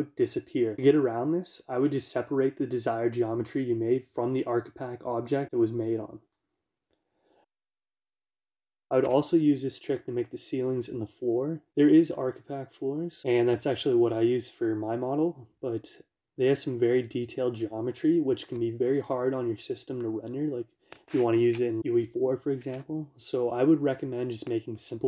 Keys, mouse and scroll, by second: 0.6 Tab, 6.1 n, 8.5 click, 8.8-11.6 shift+middle drag, 11.6 shift+a, 16.5 click, 21.0-21.8 scroll down 1, 21.8-22.5 scroll up 1, 23.4-25.0 middle drag.